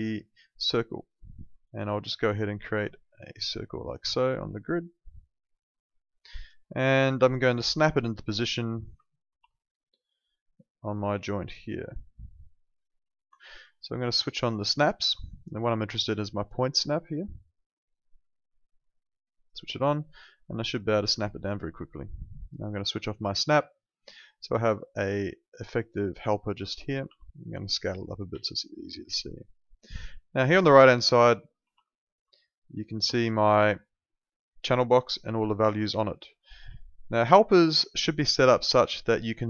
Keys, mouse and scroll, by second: 0.5 click, 4.3 alt+click, 4.6 alt+right click, 4.9 alt+middle click, 5.2 alt+click, 9.2 ctrl+2, 13.2 Escape, 17.8 click, 22.7 click, 23.7 alt+middle click, 24.0 alt+right click, 24.2 alt+click, 24.8 alt+middle click, 25.1 alt+right click, 25.4 alt+click, 27.0 r, 27.6 click, 28.4 alt+click, 31.6 ctrl+2.